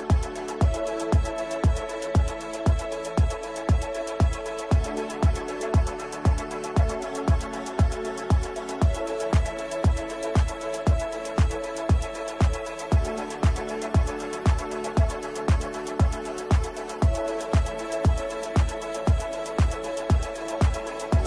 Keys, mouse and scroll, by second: 2.0-5.2 drag, 5.2-10.1 drag, 10.3 ctrl+r, 11.4-14.8 drag, 14.8 right click, 15.3-21.2 drag.